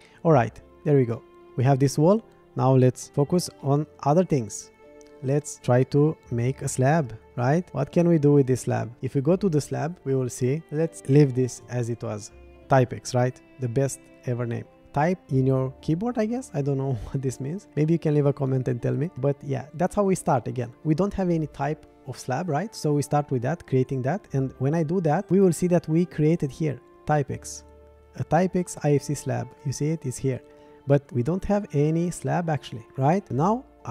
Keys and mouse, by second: 0.0 middle click, 1.2 middle drag, 3.0 shift+middle click, 3.6-4.0 shift+middle drag, 4.3-4.9 middle drag, 5.6 middle click, 7.0 shift+click, 7.3 middle click, 7.7 shift+middle click, 10.0-25.1 drag, 29.5 click.